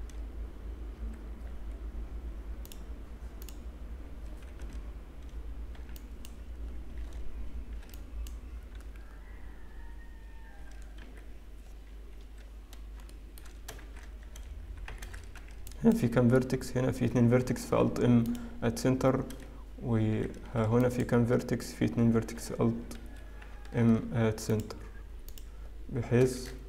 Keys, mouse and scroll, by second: 2.6 click, 3.4 click, 6.1 n, 6.1 b, 7.0 alt+a, 7.8 b, 11.6 g, 12.7-13.1 scroll up 2, 13.1 shift+middle click, 13.8 shift+z, 14.8 a, 15.5 alt+a, 15.5 b, 17.7 alt+m, 19.8 a, 20.4 alt+a, 21.3 b, 22.4 alt+n, 23.8 alt+m.